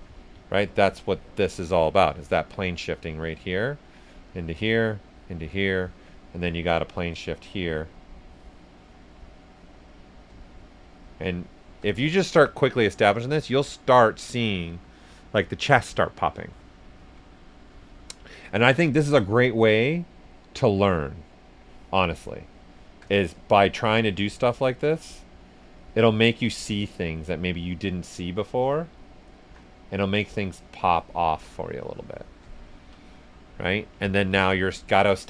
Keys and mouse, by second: 0.5 click, 1.3 ctrl+right click, 1.5 ctrl+right click, 1.5 right click, 1.5 typing, 3.1 click, 3.6 right click, 4.2-8.8 drag, 8.8 click, 9.8 right click, 10.4 shift+click, 11.0 shift+click, 11.9 ctrl+shift+right click, 12.1 ctrl+right click, 12.9-16.8 right drag, 19.3 alt+click, 22.8-23.5 typing, 28.6-32.6 alt+drag, 32.2-33.0 typing, 32.6 ctrl+right click, 34.5 right click.